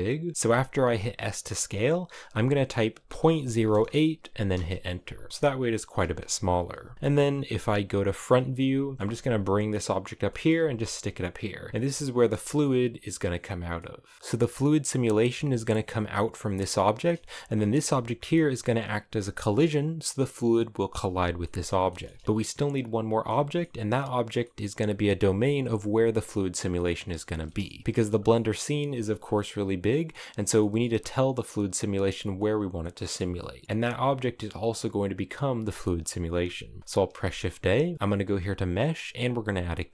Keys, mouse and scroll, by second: 0.3 s, 5.0-7.8 middle drag, 7.9 KP_1, 8.6 shift+middle click, 9.0 g, 9.9 shift+middle click, 10.2 g, 11.5 g, 12.0 g, 13.4 middle click, 14.1 g, 14.9 g, 16.5 scroll down 2, 16.7 shift+middle click, 17.1 right click, 17.4 g, 21.1-27.0 middle drag, 27.0 scroll down 1, 27.1 middle click, 27.8 scroll down 5, 28.0-29.8 middle drag, 29.8-30.2 scroll up 7, 30.2 middle click, 30.5-31.8 scroll up 1, 31.8-32.4 scroll up 1, 32.4 middle click, 32.9 a, 33.0-34.5 middle drag, 34.5-35.4 scroll up 1, 35.4-36.8 middle drag, 36.8 shift+a.